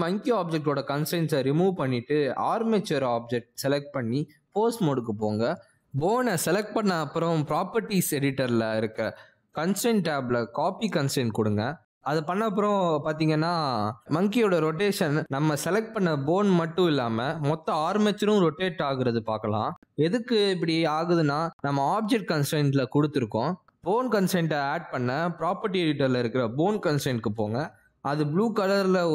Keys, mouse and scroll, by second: 1.9 ctrl+Tab, 2.2 click, 3.1 click, 4.0 ctrl+Tab, 12.1 click, 14.5 click, 17.6 ctrl+Tab, 18.1 click, 18.8 r, 19.9 r, 23.8 r, 25.0 click, 28.0 click.